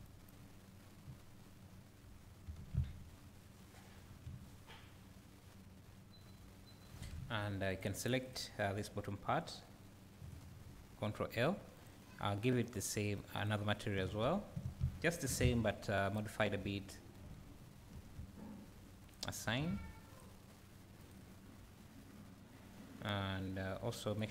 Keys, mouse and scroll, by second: 2.0-3.0 scroll up 1, 3.2-4.2 scroll down 1, 4.2 `, 7.2 Tab, 7.8 click, 10.7 l, 11.9 click, 13.5-16.1 drag, 14.7 Tab, 16.1 Tab, 19.1 click, 20.4 Tab, 20.5 click, 21.1 click.